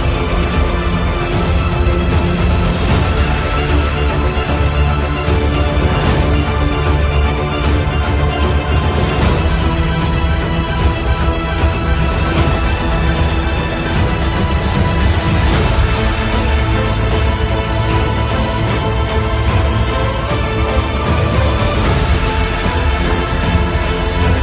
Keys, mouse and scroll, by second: 8.1-11.8 drag, 8.1 typing, 11.6 typing, 13.5 right click, 17.6 right click, 17.6 typing, 17.7 click.